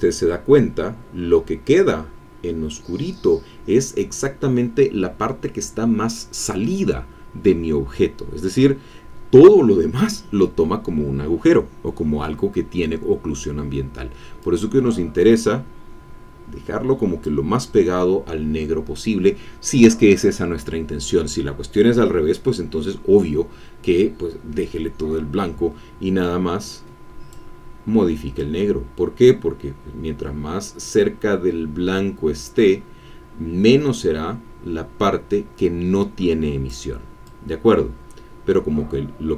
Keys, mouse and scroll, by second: 14.4-17.5 drag, 27.3 click, 28.4-36.9 drag, 37.2-39.3 drag.